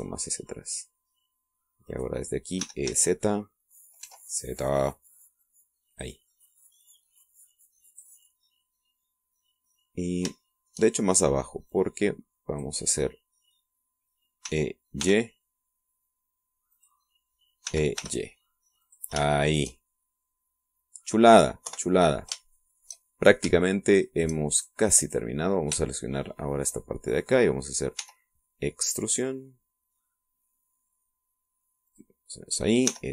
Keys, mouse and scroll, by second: 0.4-1.9 shift+drag, 1.9-3.2 middle drag, 2.8 right click, 3.6 e, 3.9 z, 5.0 z, 6.9 click, 7.8-9.2 drag, 9.9-10.9 middle drag, 11.0 shift+middle click, 12.7-13.8 drag, 15.4 e, 16.0 y, 17.7 click, 18.6 e, 19.0 y, 19.8 click, 20.4-22.2 shift+middle drag, 22.6 KP_1, 23.5 shift+middle click, 24.2 shift+scroll up 1, 25.0 shift+right click, 25.5 shift+right click, 26.0 shift+right click, 26.9 shift+middle click, 27.1 shift+right click, 29.0 e, 32.9 click.